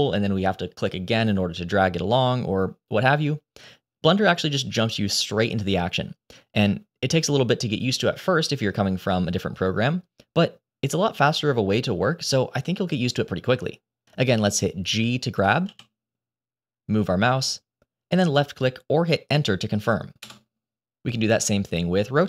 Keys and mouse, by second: 15.5 g.